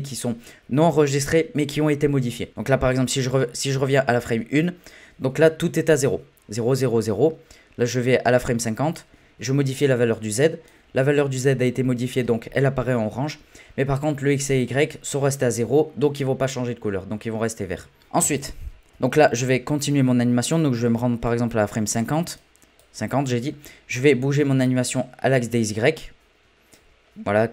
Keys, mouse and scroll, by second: 2.9-6.6 drag, 7.8-13.3 drag, 18.4-24.2 drag, 27.1-27.5 scroll down 1.